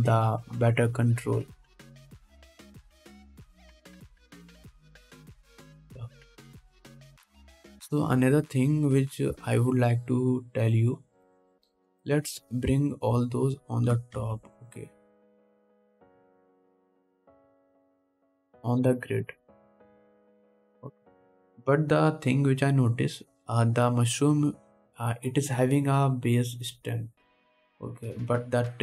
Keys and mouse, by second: 1.4-2.8 middle drag, 1.4-2.8 right drag, 3.9-17.2 middle drag, 3.9-9.3 right drag, 9.8 click, 9.8 right click, 15.1 g, 17.2-21.4 drag, 18.0 g, 20.4 middle click, 20.4 right click, 21.4 ctrl+s.